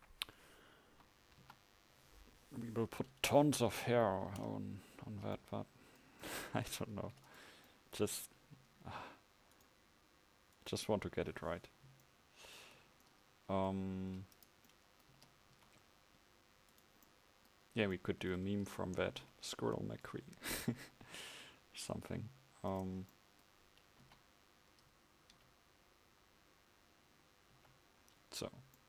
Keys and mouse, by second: 0.9 KP_1, 1.5 KP_5, 7.0 ctrl+s, 8.6 KP_1, 15.2 Tab, 15.6 a, 24.1 KP_1, 25.4 z, 27.5 z.